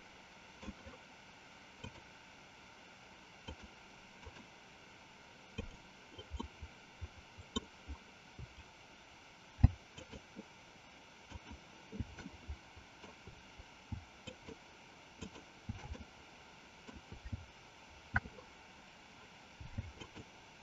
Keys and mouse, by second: 1.8 click, 3.4 click, 5.5 click, 6.4-7.5 middle drag, 9.9 alt+shift+click, 11.3 alt+shift+click, 12.3 middle click, 14.3 alt+shift+click, 15.0 alt+shift+click, 15.9-16.9 middle drag, 20.0 alt+shift+click.